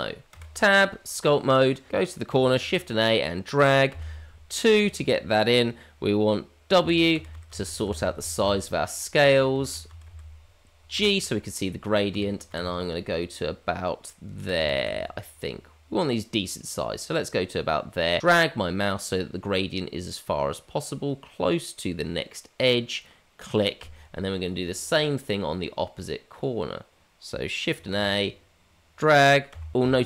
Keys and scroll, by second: 1.4 Tab, 1.9 shift+a, 2.6 shift+a, 27.9 shift+a.